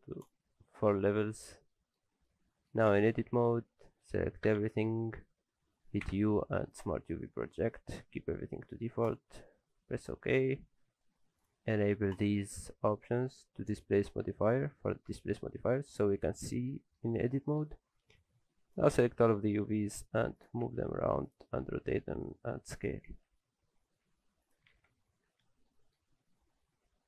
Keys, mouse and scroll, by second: 1.5-1.8 scroll down 2, 1.7 middle click, 2.0 scroll up 2, 2.3 middle click, 2.9 Tab, 3.2-4.2 scroll down 1, 4.5-5.2 scroll down 1, 4.5 a, 6.0 u, 9.9-10.4 scroll up 2, 10.1 middle click, 11.4 click, 15.5-16.1 scroll up 2, 15.7 middle click, 16.1-16.7 scroll down 3, 16.5 middle click, 16.8 shift+middle click, 17.3 middle click, 18.2 click, 19.0 scroll up 1, 19.7-20.2 scroll up 1, 19.7 s, 20.6 r, 23.1 s, 24.7 alt+a, 24.9 Tab, 25.0-25.3 scroll down 4, 25.3 alt+a, 25.7 middle click, 26.1-26.7 scroll down 2, 26.3 middle click.